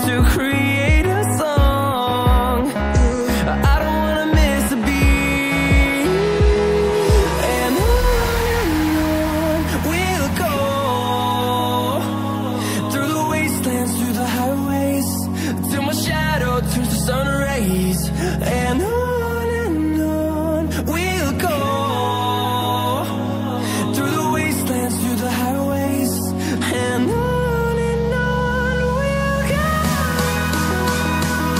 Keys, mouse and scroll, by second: 1.0 typing, 1.1 right click, 1.8 click, 4.3 ctrl+v, 5.0 right click, 5.7 click, 7.8 click, 8.7 ctrl+v, 9.5 right click, 10.2 click, 13.0 ctrl+v, 13.3 right click, 14.0 click, 16.8-17.3 scroll down 1, 17.3 click, 20.2 double click, 20.5 click, 22.5 scroll up 1, 24.1 click, 25.9-26.4 scroll down 1, 26.4 click, 28.9 scroll up 1, 29.9-30.3 scroll down 1, 30.3 scroll up 1, 30.8-31.5 scroll down 1.